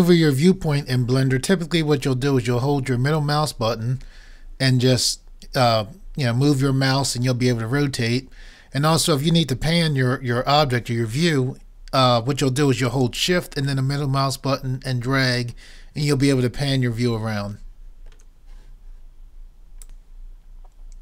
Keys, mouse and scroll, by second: 3.7-6.0 middle drag, 13.9-17.8 middle drag, 19.9-21.0 drag.